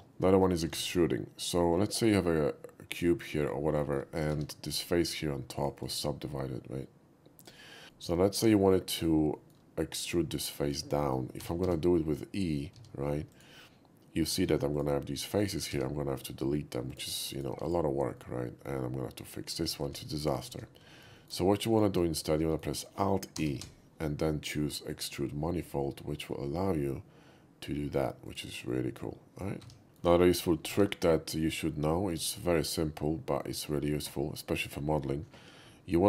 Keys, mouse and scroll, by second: 0.2 shift+middle drag, 0.8 shift+a, 3.0 click, 3.4 middle click, 3.8 middle click, 4.4 Tab, 5.6 click, 5.9-7.0 right drag, 7.4 click, 7.9 shift+middle click, 8.6 shift+middle click, 9.4 shift+middle click, 11.0 shift+middle click, 11.4 e, 11.7 z, 13.3 click, 13.7 middle click, 14.3 middle click, 14.8 click, 15.7 x, 16.9 click, 17.3 click, 17.7 click, 17.7 x, 18.2 middle click, 18.2 x, 19.7 ctrl+z, 19.9 ctrl+z, 20.1 ctrl+z, 21.2 shift+middle click, 21.7 shift+click, 22.2 middle click, 22.5 middle click, 23.4 alt+e, 24.9 click, 28.3 click, 28.7 middle click, 29.7 Tab, 29.8 middle drag, 29.8 x, 30.3 middle click, 30.9 shift+a, 32.1 click, 32.6 middle click, 33.5 shift+middle click.